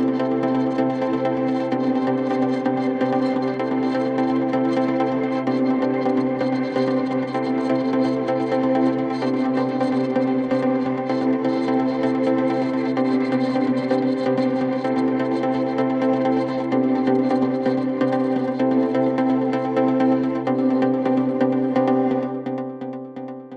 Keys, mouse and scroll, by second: 0.0 KP_1, 0.3 scroll down 3, 0.5 scroll up 2, 0.7-2.0 middle drag, 2.0-2.3 scroll down 1, 2.5 Tab, 2.8-3.8 drag, 3.8 Tab, 4.2 middle click, 4.4 KP_1, 4.9 scroll down 2, 5.4 click, 5.6 scroll up 2, 6.0 click, 6.1 right click, 6.8 click, 8.0 click, 8.6 click, 9.7 middle click, 10.2 click, 10.9 click, 11.6 scroll up 2, 11.6 middle click, 12.0-13.5 drag, 13.5-14.5 middle drag, 14.8 click, 16.2 click, 16.9-18.0 middle drag, 18.0 middle click, 18.6 click, 19.6 click, 20.1 middle click, 20.7 click, 22.1-23.5 middle drag.